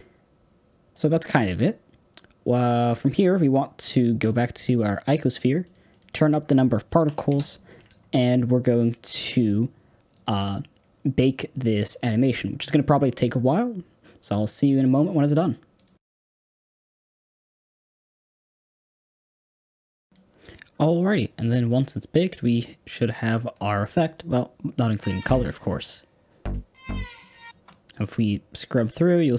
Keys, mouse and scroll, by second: 7.3-19.5 drag, 22.1-24.9 middle drag, 24.9 space, 26.4-26.8 scroll down 3, 26.8 middle click, 27.4 space, 28.0-29.3 drag.